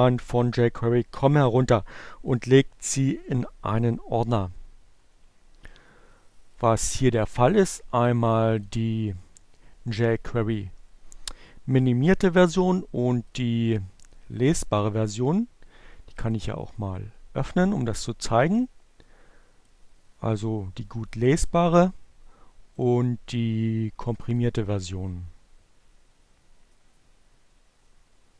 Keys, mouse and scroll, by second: 8.3 click, 12.6 click, 15.9 click, 20.2-22.5 drag, 24.0 click, 25.3 click.